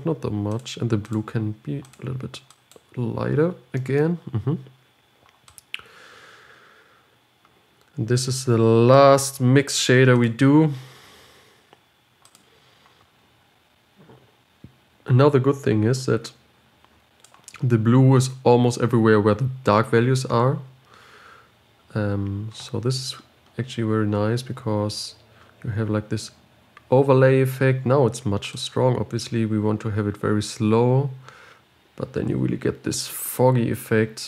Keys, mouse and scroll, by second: 2.4 click, 9.3-11.7 drag, 11.7 shift+d, 13.5-16.9 scroll up 2, 16.9 click, 29.2-31.9 drag.